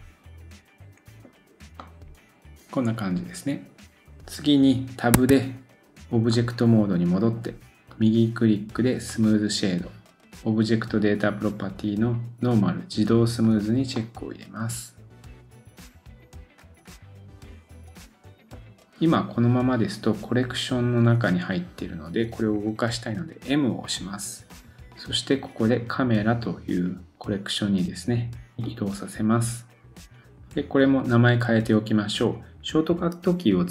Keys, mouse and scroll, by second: 1.5 scroll down 1, 1.8 middle click, 6.3 middle click, 7.9 right click, 13.4 click, 14.0 middle click, 16.4-19.4 drag, 18.4 middle click, 18.4-19.4 scroll down 1, 20.8-33.7 drag.